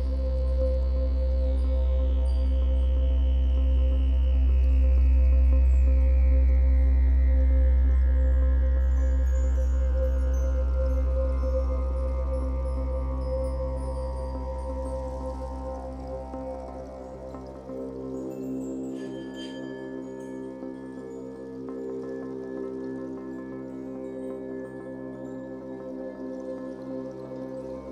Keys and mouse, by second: 0.3-2.2 typing, 4.9 click, 5.2-7.2 drag, 7.8-8.9 drag, 9.4 alt+shift+click, 10.1-11.2 ctrl+alt+drag, 11.9 ctrl+alt+click, 15.3-15.9 typing, 17.2 click, 18.1 click, 18.9 click, 20.6 click, 21.4 click, 22.2-22.7 typing, 24.2 click, 25.2 click, 25.9 click.